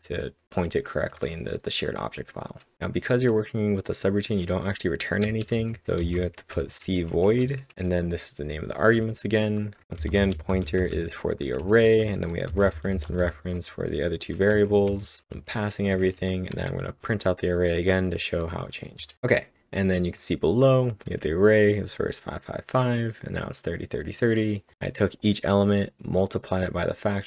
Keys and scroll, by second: 0.0-1.5 typing, 2.5-3.2 typing, 5.0-7.9 typing, 10.2-13.4 typing, 19.0 ctrl+Num_Lock, 19.0 typing.